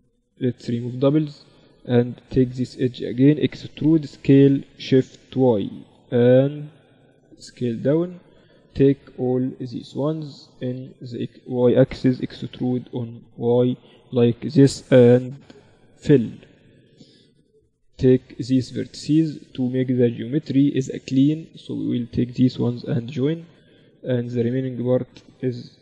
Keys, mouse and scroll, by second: 1.3 a, 1.5-3.4 right drag, 3.3 e, 8.3 middle click, 9.1 KP_7, 9.9 middle click, 9.9 z, 11.7 e, 15.4 f, 15.9-17.6 middle drag, 16.1 z, 18.1-21.9 drag, 18.7-23.1 right drag, 22.3 j, 23.6 Tab, 24.1-25.1 drag, 25.1 KP_7, 25.7-25.8 right drag.